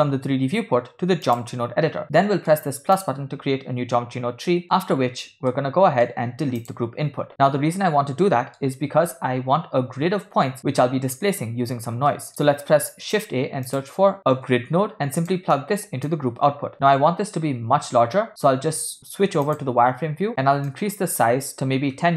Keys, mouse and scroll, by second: 2.0-2.5 middle drag, 2.9 click, 4.5 ctrl+middle click, 5.6 shift+middle click, 6.7 click, 6.9 x, 8.2-8.6 middle drag, 12.1 ctrl+middle click, 12.5 shift+a, 15.5-16.8 alt+right drag, 20.7-22.1 shift+drag.